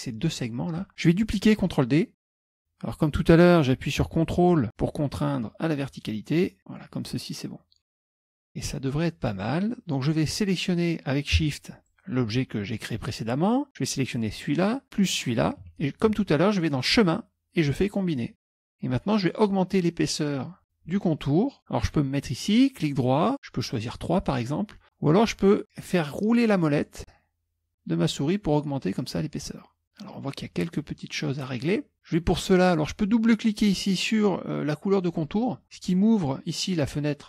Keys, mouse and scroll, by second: 2.2 ctrl+d, 2.6-7.0 drag, 11.9 shift+click, 14.2 shift+click, 15.2 shift+click, 16.9 click, 18.4 click, 23.3 right click, 23.8 click, 26.6-27.5 scroll up 1, 27.5-28.1 scroll up 1, 28.1 scroll up 1, 28.6-29.3 scroll down 2, 35.1 click.